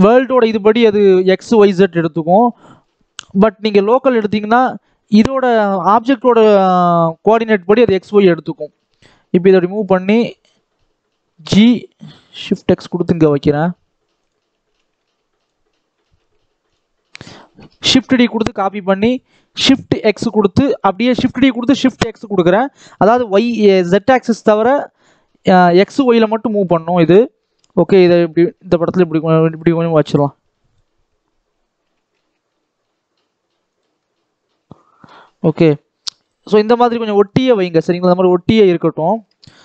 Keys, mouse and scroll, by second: 2.6-6.8 drag, 6.8 KP_7, 7.2-7.6 scroll up 2, 8.5 click, 11.2 g, 14.5 g, 15.8 r, 17.6 shift+d, 29.8 click, 31.7 g, 33.9-36.5 middle drag, 36.5-36.8 scroll up 2, 36.8 shift+middle click, 37.5 scroll up 1, 37.8 middle click, 38.6-39.2 scroll down 1, 39.2 KP_7.